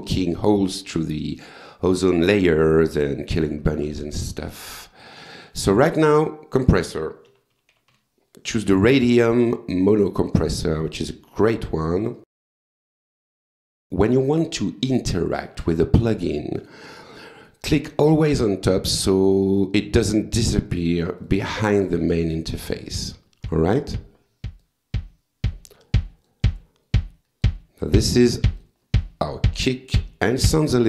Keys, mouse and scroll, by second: 4.6 click, 5.0 right click, 5.9 click, 7.0-8.4 typing, 9.8 click, 12.1 click, 13.3 click, 16.8 right click, 17.9 click, 18.7 click, 19.5 click, 20.7 click, 21.2 click, 22.9 click, 24.6-25.7 drag, 25.8 click, 27.0 click, 28.6 click.